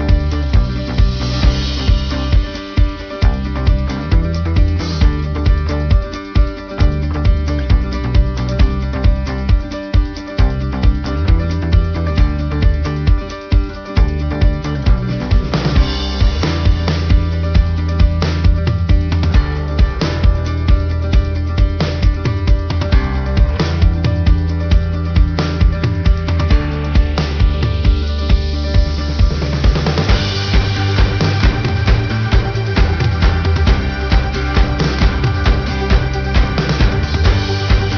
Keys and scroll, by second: 9.4 ctrl+-, 10.1 ctrl+=, 14.3 ctrl+alt+shift+n, 17.2 ctrl+=, 20.2 ctrl+=, 21.7 ctrl+=.